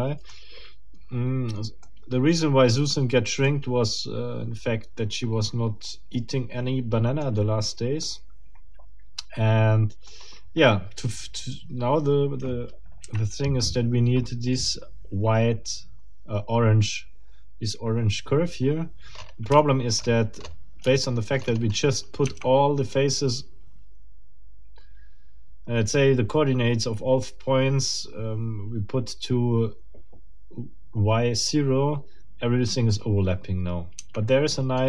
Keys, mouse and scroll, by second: 0.4-0.8 shift+scroll up 4, 1.8-4.8 middle drag, 6.2-7.4 middle drag, 7.4-7.8 scroll up 1, 8.0-10.3 middle drag, 10.4 scroll down 1, 13.0 KP_1, 19.2 scroll up 1, 19.6 shift+middle click, 20.0-20.6 shift+scroll up 2, 21.0 shift+middle click, 21.4-21.7 shift+scroll up 1, 22.2 shift+Tab, 34.0 Tab, 34.4-34.8 scroll down 3.